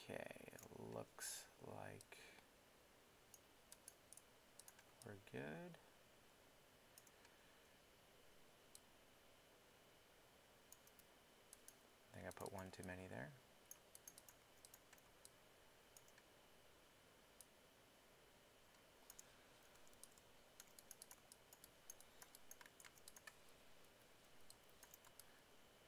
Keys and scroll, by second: 3.6 alt+w, 4.4 w, 19.6 alt+3, 23.9 alt+i, 24.2 alt+i.